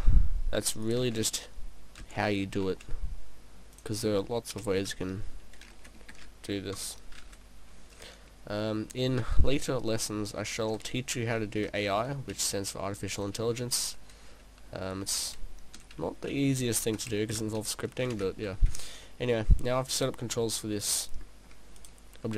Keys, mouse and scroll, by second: 1.0 click, 1.1 shift+d, 2.0 d, 2.7 shift+d, 3.8 click, 4.6 p, 6.8 KP_0, 8.5 scroll up 1, 8.9 p, 19.0 middle click, 19.9 middle click, 19.9 right click, 21.8 right click.